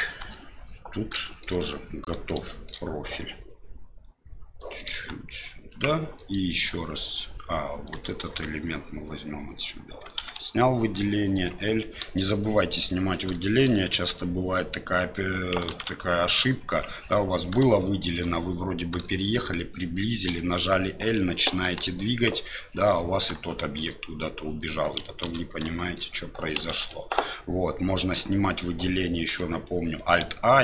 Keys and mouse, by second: 1.3 shift+middle click, 2.5 shift+middle click, 4.9 g, 8.1 shift+middle click, 10.2 alt+a, 13.5 shift+middle click, 15.7 alt+a, 17.8 middle click, 19.1 shift+middle click, 21.6 l, 21.6 g, 23.5 middle click, 25.2 ctrl+z, 25.8 shift+middle click, 26.7 alt+a.